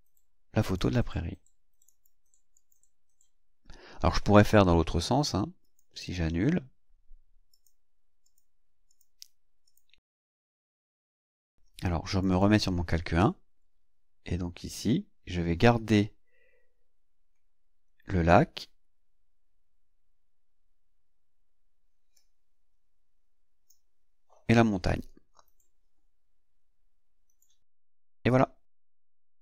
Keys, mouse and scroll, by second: 0.8 click, 1.9 click, 2.5 click, 5.7 click, 7.5 click, 8.3 click, 8.9 click, 9.7 click, 12.2 click, 14.8-19.3 drag.